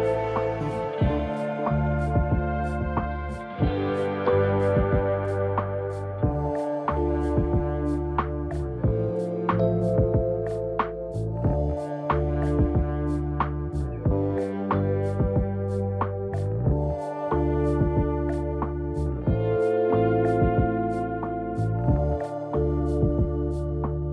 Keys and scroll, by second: 11.7 ctrl+z, 17.2 ctrl+z.